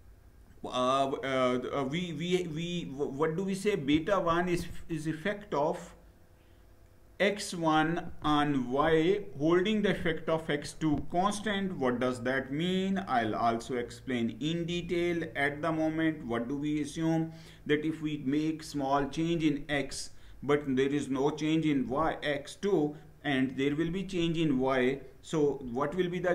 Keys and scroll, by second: 25.1 Down.